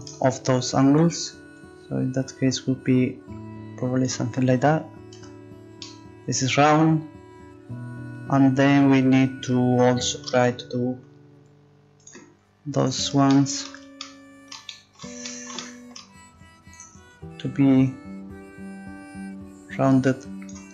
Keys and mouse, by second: 1.5-3.4 drag, 1.5 right click, 5.2 Tab, 5.8 click, 10.3 Tab, 13.3-14.6 right drag, 14.7 right click, 16.7-18.5 middle drag, 18.5-19.7 drag.